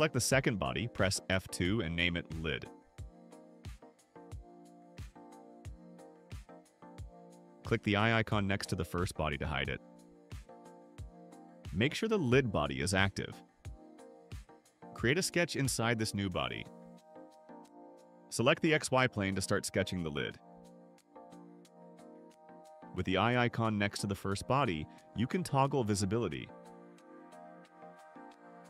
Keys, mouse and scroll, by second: 0.0 click, 1.0 F2, 2.4 shift+l, 9.2 click, 11.8 click, 17.6 click, 19.7 click, 21.6 right click, 23.6 click, 26.1 click.